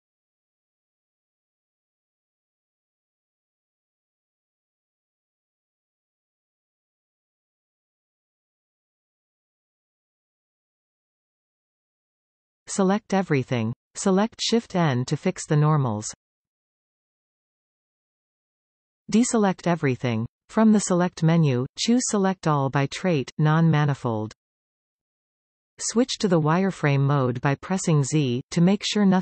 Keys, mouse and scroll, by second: 0.2-1.4 scroll up 2, 1.4 alt+shift+click, 2.5 alt+shift+click, 4.2 alt+f, 4.6-4.9 scroll down 2, 4.9-6.1 middle drag, 6.1-6.4 scroll up 1, 6.4-7.5 middle drag, 7.5 alt+a, 7.7 alt+shift+click, 8.2-9.6 scroll up 3, 9.6 alt+shift+click, 10.1-11.5 scroll down 2, 11.5 alt+f, 11.8-12.1 scroll down 1, 12.1 middle click, 12.6 a, 13.1-14.4 middle drag, 14.4 KP_5, 15.8 shift+n, 18.9 alt+a, 21.0-24.2 drag, 25.4 z, 27.8-29.2 middle drag.